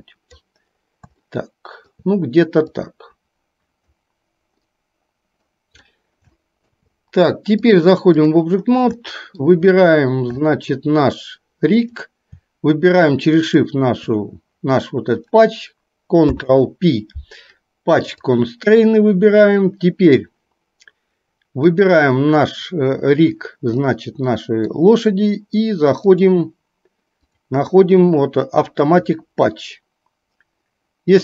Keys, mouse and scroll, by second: 1.3 shift+middle click, 2.7-4.1 drag, 4.7-5.7 middle drag, 6.6 shift+middle click, 7.8-8.3 drag, 9.1-9.6 shift+middle drag, 10.6 shift+middle click, 13.3 shift+click, 16.9 ctrl+p, 23.8-25.0 middle drag, 26.1 click.